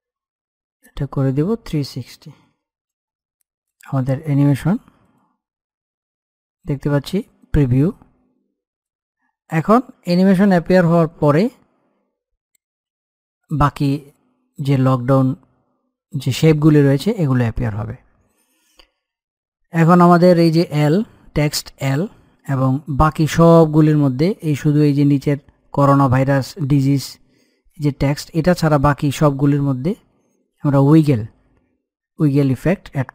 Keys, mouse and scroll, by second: 0.7 click, 3.5-5.0 drag, 8.7-17.7 drag, 22.4-25.1 middle drag.